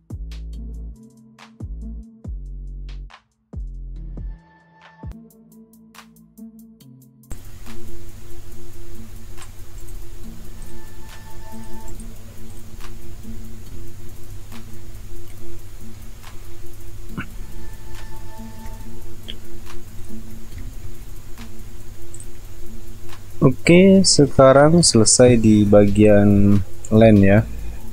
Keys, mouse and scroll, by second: 1.8 ctrl+click, 2.0 space, 2.6 space, 5.0 alt+click, 5.2 ctrl+alt+z, 5.4 space, 5.9 space, 6.7 alt+click, 7.0 ctrl+click, 12.8-13.2 alt+scroll down 1, 15.4 alt+scroll up 1, 17.0 alt+scroll down 1, 17.9 alt+scroll up 1, 18.5 alt+scroll down 1, 19.1-19.5 alt+scroll up 1, 22.1 ctrl+alt+z, 22.8 alt+scroll up 1, 23.5-23.8 alt+scroll down 1, 23.8-24.9 alt+scroll up 1, 26.5 alt+scroll up 1, 27.0 alt+scroll down 1.